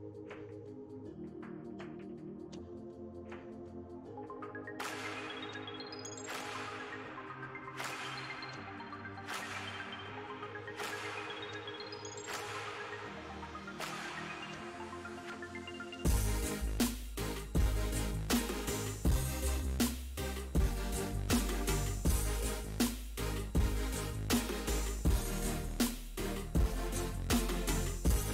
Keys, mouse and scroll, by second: 0.3 click, 1.2-2.4 middle drag, 2.4 shift+c, 2.9 f, 3.7-6.1 ctrl+drag, 6.1-8.4 middle drag, 8.4 f, 9.1 middle click, 9.6 f, 10.6-12.1 drag, 12.1 f, 12.7 click, 13.5-14.5 middle drag, 14.5-17.5 drag, 17.5 middle click, 18.0 click, 18.7 middle click, 19.2-23.8 drag, 23.8 middle click, 24.4-26.7 drag, 26.7-28.3 middle drag.